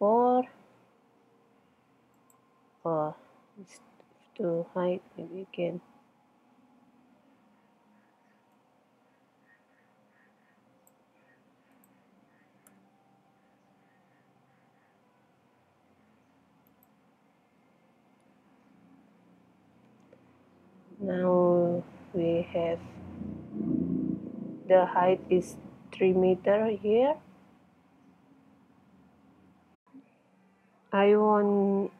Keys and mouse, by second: 2.2-4.0 drag, 4.0 middle click, 8.3 middle click, 8.6-10.7 drag, 11.8 middle click, 12.6-15.5 drag, 16.8 middle click, 16.8 click, 17.1 middle click, 17.6 click, 18.4 middle click, 19.3 middle click, 20.3 middle click, 29.4 middle click.